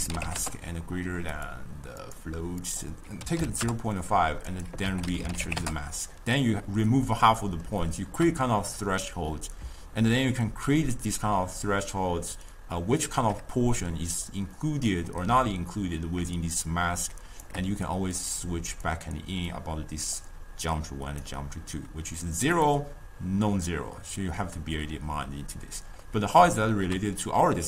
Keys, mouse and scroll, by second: 7.5-8.9 middle drag, 8.9-12.0 drag, 14.5-16.4 middle drag, 16.6-18.3 shift+drag, 19.5-23.8 drag, 26.1-26.6 scroll down 2, 26.6-27.6 ctrl+middle drag.